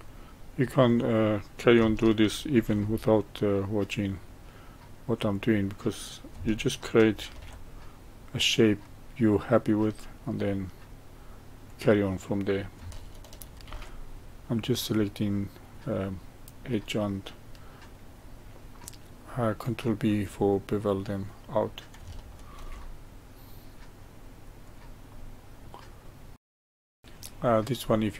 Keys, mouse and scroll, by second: 0.8 click, 2.5 ctrl+b, 5.3 click, 7.2 ctrl+b, 11.6 click, 13.6 ctrl+b, 16.9-19.9 middle drag, 20.8 click, 22.5 ctrl+b, 25.0-26.4 middle drag, 26.4 ctrl+b, 26.5 shift+middle click, 26.5 scroll up 1, 26.6 ctrl+r, 26.8 middle click, 26.8 ctrl+z, 27.0-27.6 middle drag, 27.9-28.1 middle drag.